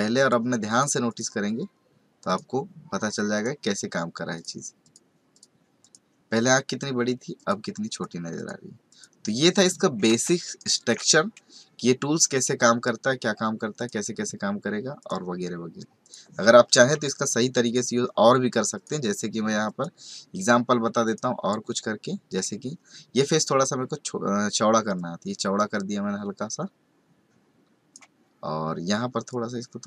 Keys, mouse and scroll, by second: 0.2 click, 1.0 click, 2.2 click, 4.3 click, 4.8 click, 5.3 click, 7.3 click, 7.9 click, 8.9 click, 10.2-10.9 typing, 10.5 right click, 10.7 click, 12.3 click, 13.7 click, 15.0 click, 16.0 click, 17.0 right click, 17.7 click, 18.7 click, 21.0 click, 24.9 click.